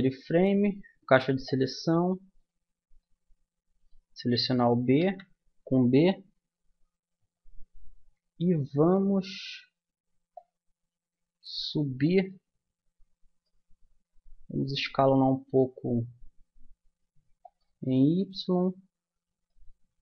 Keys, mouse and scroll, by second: 0.8 b, 3.0 click, 5.0 z, 7.7 middle click, 8.8-10.3 middle drag, 10.3-12.0 drag, 14.6 s, 17.8-20.0 middle drag.